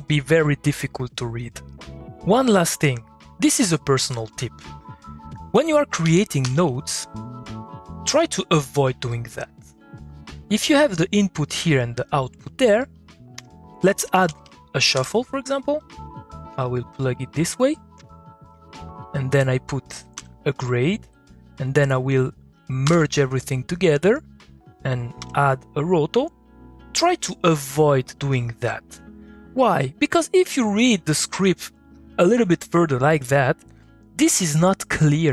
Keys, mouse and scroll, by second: 5.5 click, 6.9 middle click, 7.0-10.0 drag, 10.0 middle click, 10.3 click, 10.6 middle click, 12.9 click, 13.3 Tab, 13.5-14.6 typing, 14.7 Down, 14.9 Return, 15.8 click, 17.9-18.5 drag, 18.9-19.3 drag, 20.1 g, 21.1-22.1 drag, 22.9 m, 23.5 click, 25.2 o, 25.8-29.9 drag, 30.0 middle click, 30.1 click, 31.0 middle click, 31.4 click, 31.8 middle click.